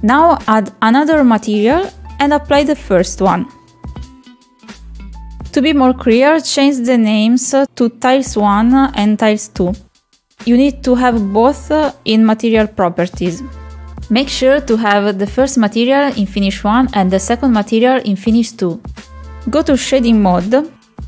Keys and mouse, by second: 1.5 click, 2.0 click, 3.8 click, 4.6 click, 7.0 click, 7.6 click, 7.8 click, 8.5 click, 8.9 click, 9.0-12.5 drag, 12.6-13.7 drag, 13.9 click, 15.7 click, 16.8 click, 18.8 click.